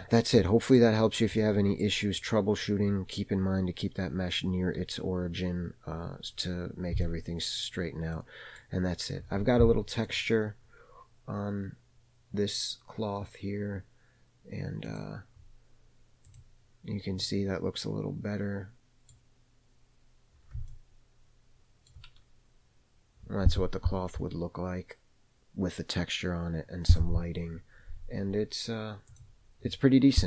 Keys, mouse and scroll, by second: 0.3-0.7 middle drag, 0.8-1.3 scroll down 2, 1.3 middle click, 2.2-3.3 scroll up 2, 7.0-7.5 middle drag, 7.6-8.1 scroll down 1, 8.1 middle click, 8.8 scroll up 1, 10.0 click, 14.8 click, 16.2 click, 17.1 scroll up 1, 17.1-19.0 middle drag, 19.1-20.2 middle drag, 20.6-21.9 shift+middle drag, 29.3 click.